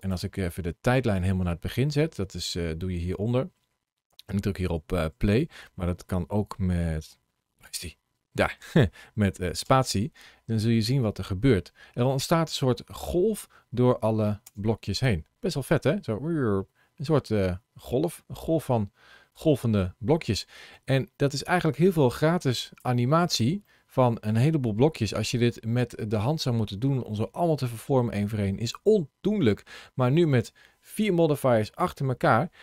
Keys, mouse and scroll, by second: 9.5 space, 14.3 space, 15.6 click, 23.1-23.7 scroll down 1, 23.7 middle click, 24.2 middle click.